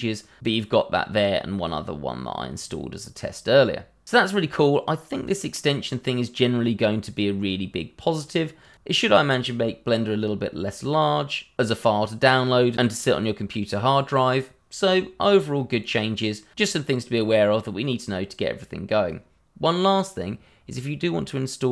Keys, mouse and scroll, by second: 2.5 click, 5.1 click, 14.7 scroll down 1, 15.1-16.5 scroll up 1.